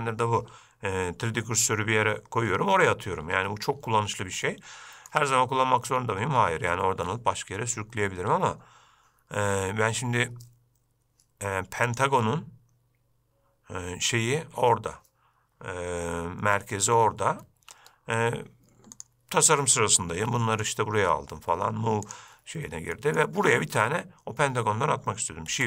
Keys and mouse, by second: 4.6-5.3 shift+middle drag, 12.0-15.3 drag, 17.8 Escape, 19.2 click, 20.5 g, 23.1 middle drag.